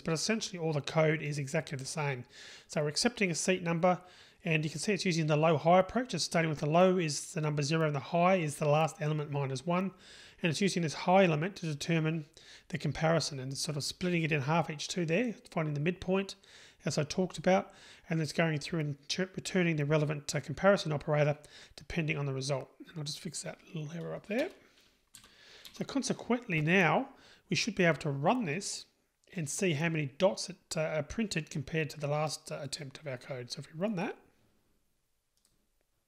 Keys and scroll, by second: 35.5 ctrl+shift+r.